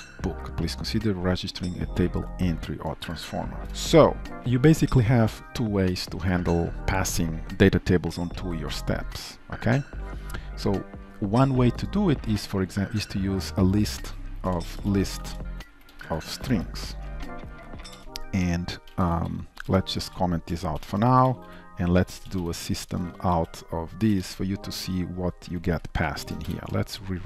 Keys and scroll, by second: 3.6 ctrl+shift+F12, 14.0 ctrl+shift+Right, 17.9 shift+Return, 18.9 ctrl+s, 20.8 ctrl+/, 24.3 Return, 25.6 ctrl+s, 26.7 shift+F10.